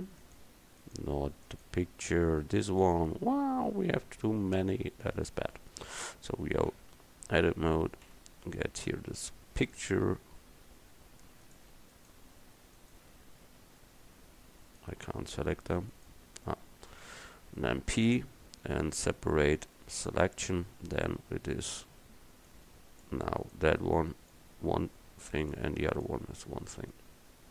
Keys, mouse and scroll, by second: 2.1 g, 6.0 Tab, 6.8 a, 8.1 l, 8.9 l, 11.5-16.0 drag, 16.0-18.1 right drag, 18.1 p, 21.1 Tab, 23.5 right click, 25.3-26.3 drag, 26.0-27.5 right drag.